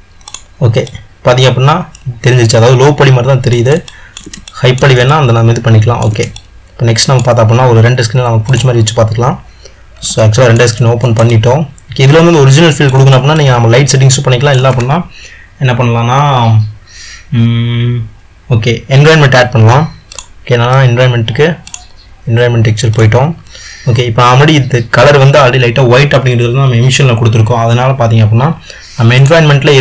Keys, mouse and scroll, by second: 0.0 click, 0.5 click, 1.1-9.1 middle drag, 9.1 click, 10.4-21.7 ctrl+middle drag, 23.5-29.8 drag.